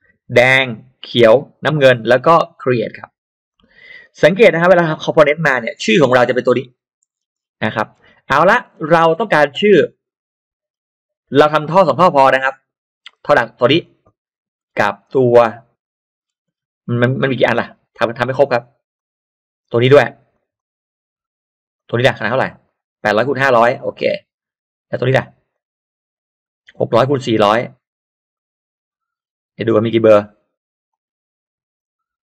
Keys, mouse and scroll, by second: 2.9 click, 3.5 click, 3.7 middle click, 4.7 click, 5.6 click, 6.3 click, 6.5 click, 7.1-7.4 scroll down 1, 7.1 space, 7.7 middle click, 7.9 scroll down 1, 8.5 scroll up 2, 8.5 middle click, 8.7 scroll down 2, 9.9 click, 10.4-10.7 scroll up 2, 12.3 scroll up 1, 13.0 click, 13.8 click, 14.3-14.9 scroll down 1, 16.1-16.7 scroll down 1, 16.7-17.2 scroll down 1, 17.5-17.8 scroll up 1, 18.9 click, 20.5 click, 21.7 click, 22.6 click, 22.9 click, 23.8 click, 25.5 click, 27.8 click, 28.3 click, 28.7-29.8 scroll down 4, 30.0-30.3 scroll up 2, 30.9 click.